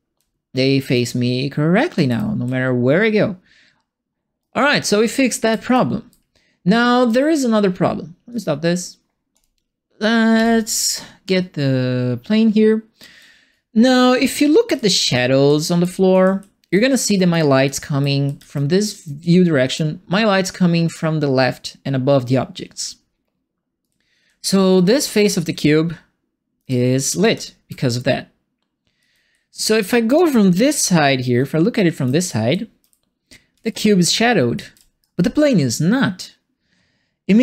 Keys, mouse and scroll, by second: 0.1 d, 1.9 q, 2.4 a, 4.5 d, 5.0 w, 5.7 e, 8.3 click, 9.3 click, 10.3 f, 11.3-13.0 alt+right drag, 13.0-13.5 alt+scroll up 3, 13.5-17.3 right drag, 14.4-19.2 typing, 17.3-19.7 right drag, 23.8-35.0 right drag, 23.8-27.8 typing, 28.9 d, 29.3 a, 30.1 w, 31.3-35.0 typing.